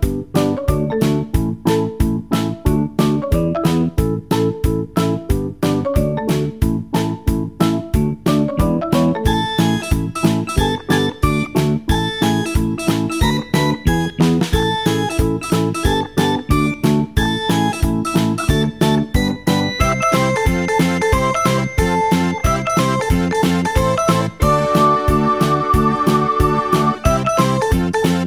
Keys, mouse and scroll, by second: 4.2 scroll down 1, 5.5 s, 7.2 g, 9.6-11.6 shift+middle drag, 11.6 s, 12.7 s, 14.5 g, 19.1-23.5 drag.